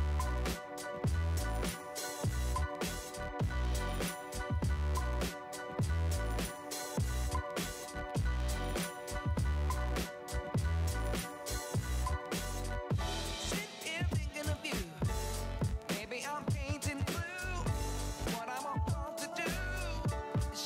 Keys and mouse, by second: 4.1 ctrl+z, 4.8-7.9 middle drag, 5.6 ], 6.2 alt+], 6.5-20.6 ctrl+drag, 8.3 ctrl+z, 20.3 [, 20.5 [.